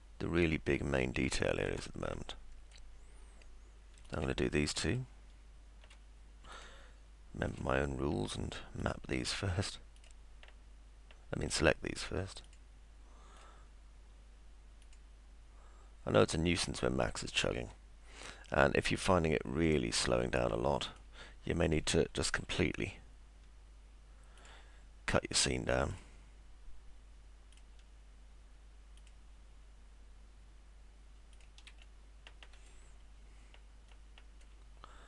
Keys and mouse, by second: 0.0-1.7 alt+middle drag, 2.1 middle click, 4.9 ctrl+click, 8.8 ctrl+click, 10.0 ctrl+click, 11.5 ctrl+click, 12.5 ctrl+click, 13.4 ctrl+click, 14.8 ctrl+click, 17.2 ctrl+click, 17.7 middle click, 20.9 ctrl+click, 22.4 ctrl+z, 24.4 ctrl+click, 25.9 ctrl+click, 29.0 ctrl+click, 31.8 middle click.